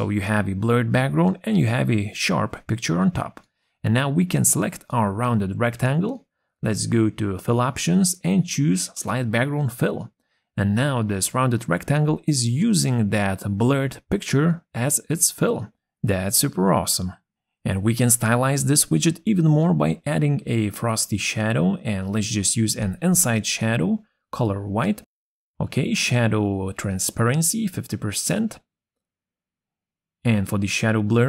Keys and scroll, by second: 16.5 ctrl+z.